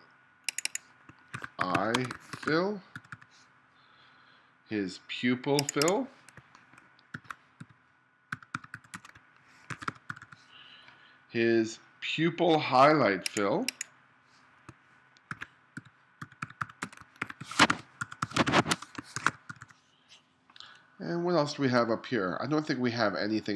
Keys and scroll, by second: 1.4-3.0 typing, 7.2-10.1 typing, 15.3-19.5 typing.